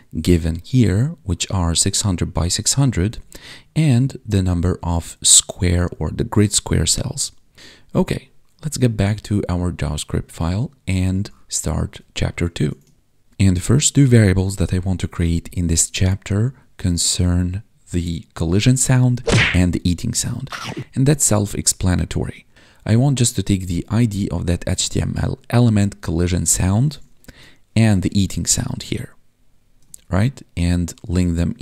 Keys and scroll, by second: 3.2 Tab, 27.2 ctrl+Tab, 29.8 ctrl+Tab.